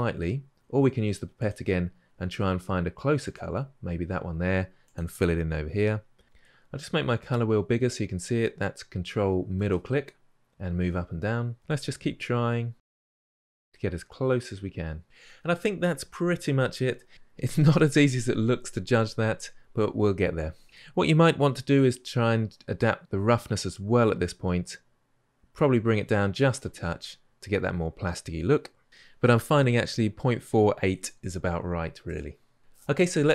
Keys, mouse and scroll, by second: 3.0 click, 4.8-5.4 scroll up 3, 10.5-13.2 drag, 13.9-23.0 drag, 28.9-33.3 middle drag.